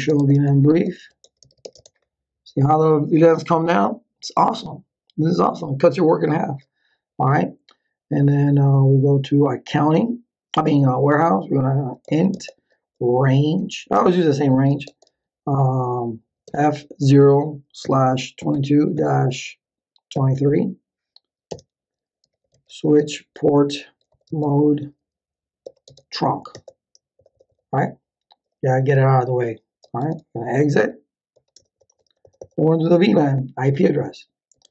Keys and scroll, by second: 0.0-2.1 typing, 11.7-15.2 typing, 16.5-20.8 typing, 21.5 Return, 22.0-24.1 typing, 24.3 Tab, 25.6 t, 25.9 Tab, 26.5 Return, 30.0-31.3 typing, 31.6 Return, 34.3-34.7 typing.